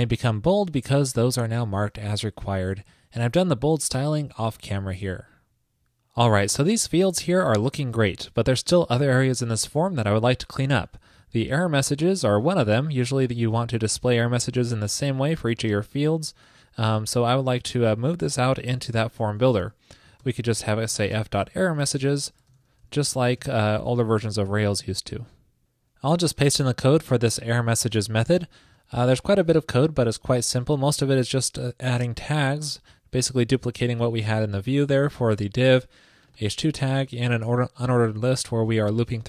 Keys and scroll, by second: 19.1 super+x, 21.2 ctrl+shift+>, 24.0 super+Right, 24.5 super+s, 27.9 super+v.